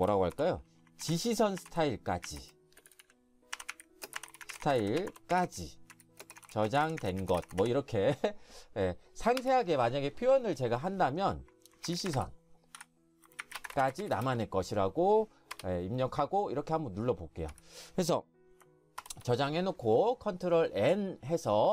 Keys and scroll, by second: 0.0-8.9 typing, 9.4 Return, 11.6-14.6 typing, 17.5 Escape, 19.0 ctrl+n.